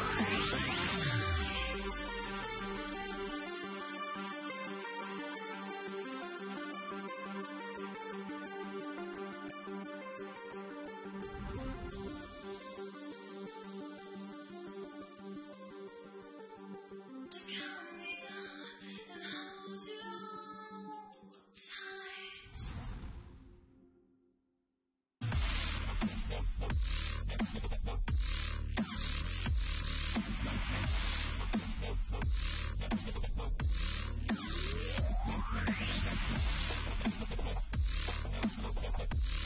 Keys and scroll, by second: 2.0 ctrl+shift+Return, 6.1 Left, 12.0-15.8 typing, 21.6 Return, 22.8 Delete, 25.8 Return, 27.0 Delete, 29.3 Return, 29.9-31.1 typing, 33.3 ctrl+t.